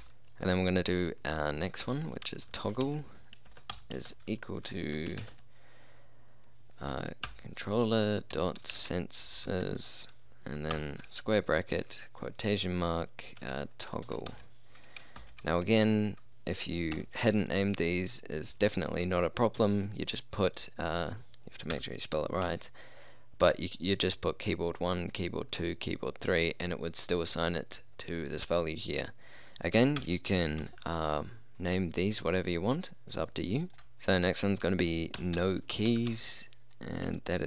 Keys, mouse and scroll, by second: 0.2 Return, 0.4 BackSpace, 1.9-5.4 typing, 8.2-9.7 typing, 11.7 shift+', 13.5-15.2 typing, 17.0 ], 21.8 Left, 22.5 l, 30.0 Left, 30.7 l, 33.8 BackSpace, 35.2-36.1 typing.